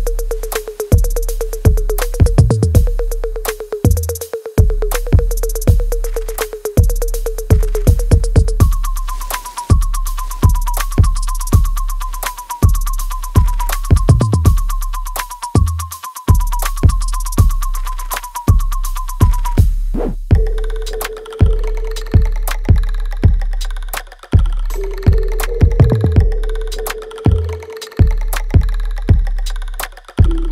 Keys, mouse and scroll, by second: 0.1 alt+click, 0.7 alt+middle click, 1.4-4.1 alt+drag, 5.6 alt+right click, 6.0 alt+middle click, 7.0 click, 8.8 alt+right click, 9.4 alt+click, 10.1 alt+right click, 10.5-12.0 alt+drag, 12.0 click, 13.6 alt+right click, 14.2 alt+middle click, 15.1 click, 16.9-18.3 alt+right drag, 18.3-22.8 ctrl+drag, 22.8 right click, 23.4 click, 23.7 alt+right click, 25.1 click, 25.5 alt+click, 26.6 alt+right click, 27.1-29.8 alt+drag, 29.8 alt+middle click, 30.3 alt+click.